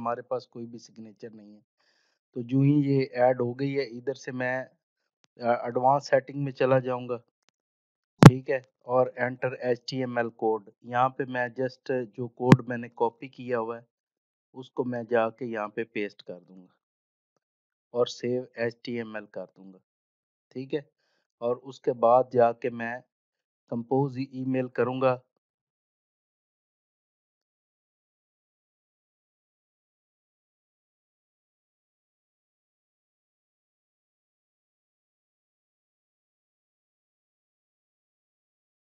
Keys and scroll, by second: 13.4 ctrl+c, 16.3 ctrl+v.